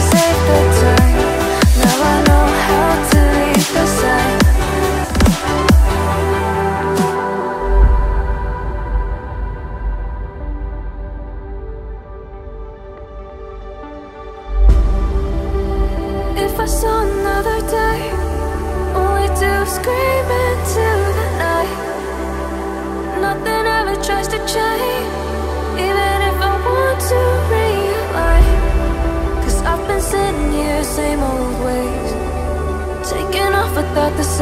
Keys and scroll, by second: 0.3 ctrl+t, 7.7 ctrl+t, 24.1 ctrl+t.